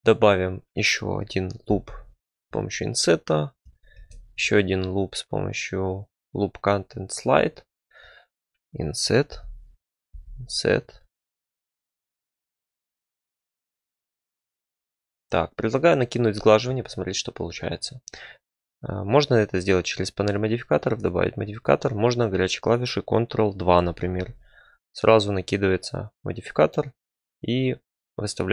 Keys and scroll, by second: 1.6 i, 3.9 ctrl+r, 8.3 3, 9.3 i, 10.1 i, 11.5 alt+s, 12.3 i, 12.7 alt+s, 16.6 Tab, 24.0 ctrl+2.